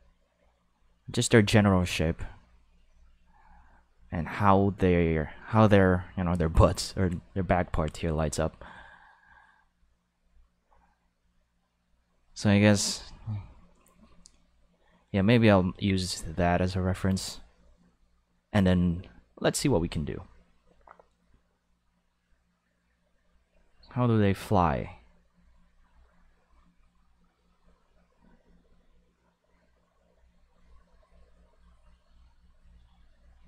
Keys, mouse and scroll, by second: 12.7 click, 17.1 click.